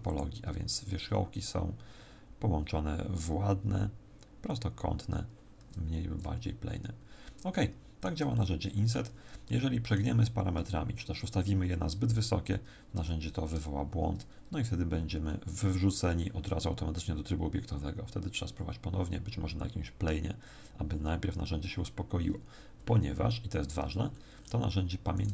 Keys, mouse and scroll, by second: 6.5-7.5 scroll down 6, 7.5 shift+middle click, 8.3 middle click, 12.9 Tab, 23.8 Tab, 24.0-25.1 scroll up 8, 25.1 right click.